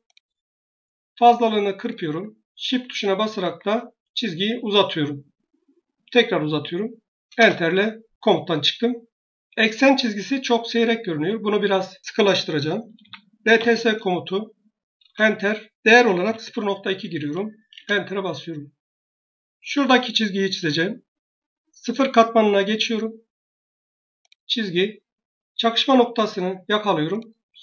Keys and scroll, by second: 7.2 shift+Return, 12.7-13.9 typing, 14.9 Return, 15.9-17.0 typing, 17.6 Return.